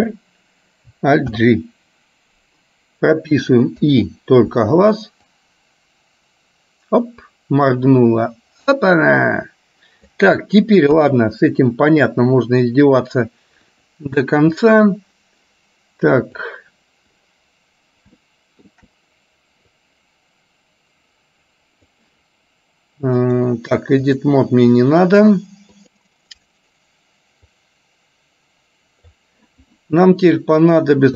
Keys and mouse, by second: 0.1 alt+r, 1.5 alt+g, 4.0 i, 5.5-10.4 drag, 11.0 KP_1, 13.8 click, 16.5 click, 18.3 shift+middle click, 19.9-22.0 drag, 23.4-24.5 drag, 25.9 click, 27.8-29.4 drag.